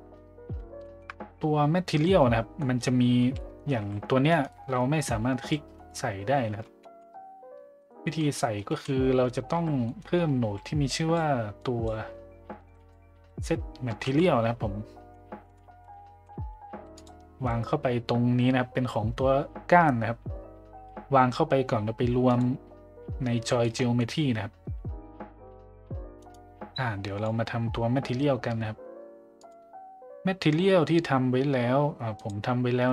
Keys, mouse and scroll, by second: 0.8 shift+middle drag, 1.9 middle drag, 2.6 middle click, 3.3 middle drag, 3.8 a, 6.8 shift+z, 7.8 middle click, 8.3 middle drag, 8.7 z, 9.5 a, 9.8 middle click, 10.9-11.2 drag, 11.6 click, 12.6 shift+a, 23.6 middle click, 27.2 click, 29.4-32.3 drag.